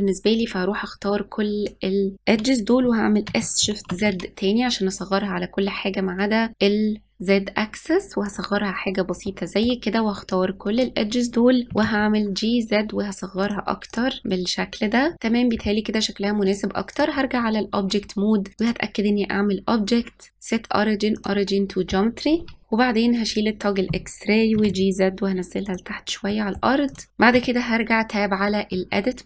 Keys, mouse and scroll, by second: 0.3 click, 3.2 s, 9.2-10.2 middle drag, 10.2 click, 11.7 g, 13.8 click, 16.4-20.3 drag, 22.6 click, 23.2-24.5 drag, 24.5 g, 26.2 middle click, 26.8 click, 27.3 Tab, 28.6-29.2 middle drag.